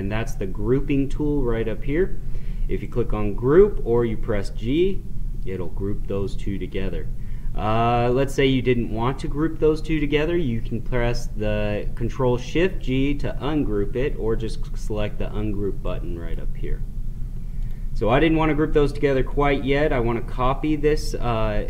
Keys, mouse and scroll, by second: 2.8 click, 8.1 click, 15.8-21.4 drag.